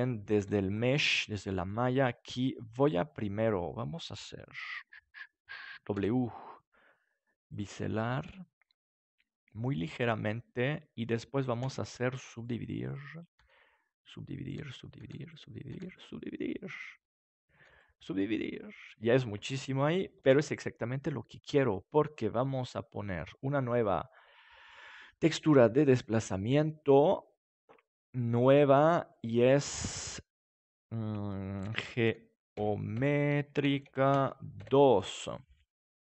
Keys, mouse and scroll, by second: 0.3 ctrl+s, 5.9 w, 10.2-12.0 drag, 11.6 w, 13.3 w, 14.4 w, 15.0 w, 15.7 w, 17.5 w, 19.4 Tab, 20.2 ctrl+s, 23.6 click, 28.3-30.8 drag.